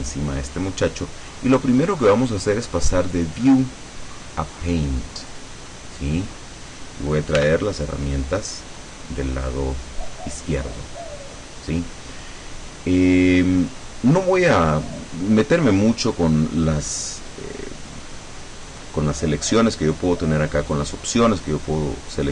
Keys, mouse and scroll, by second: 3.2 click, 5.3 click, 7.5 t.